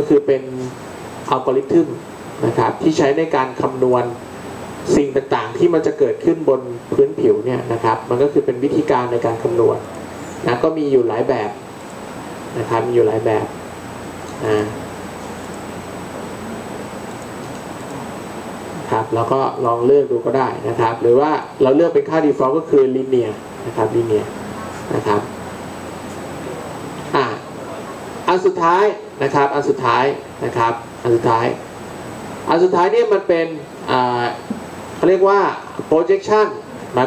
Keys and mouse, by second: 15.0 middle click.